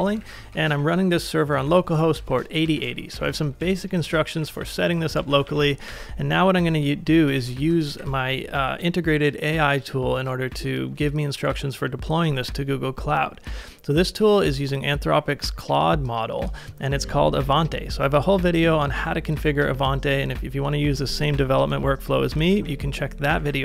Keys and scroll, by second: 0.0-1.2 typing, 2.2 ctrl+c, 2.8 ctrl+w, 3.6 ctrl+w, 4.0-6.0 typing, 7.4 super+v, 7.9 ctrl+s, 8.3 typing, 21.7-22.5 k.